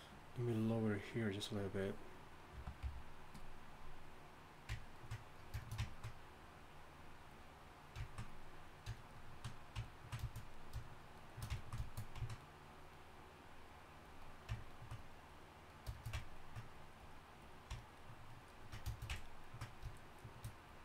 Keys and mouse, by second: 2.5 g, 2.8 f, 4.8-5.8 drag, 6.3-10.5 drag, 9.0 middle click, 14.2-19.4 drag, 20.7-20.8 drag.